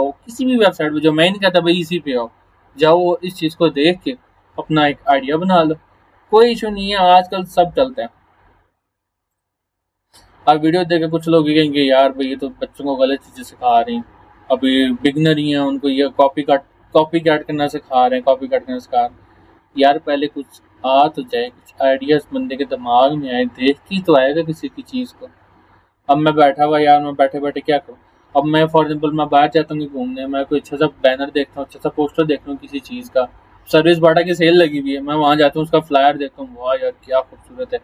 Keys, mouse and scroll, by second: 6.4 scroll down 1, 9.3 click, 11.7 scroll down 1, 13.2 scroll up 1, 14.8 scroll down 1, 16.7 scroll down 1, 17.8 scroll down 1, 18.4 scroll down 1, 19.4 scroll up 1, 21.4 click, 23.5 scroll down 1, 24.4 scroll down 1, 25.0 scroll up 1.